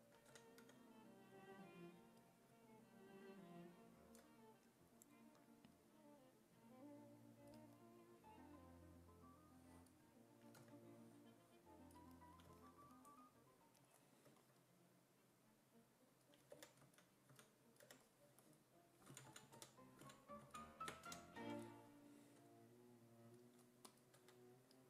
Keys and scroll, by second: 0.3 w, 0.7 e, 10.6 w, 16.3-17.8 typing, 19.1 z, 19.6 2, 20.0 ctrl+z, 20.5 ctrl+z, 20.8-21.9 typing, 24.2 2.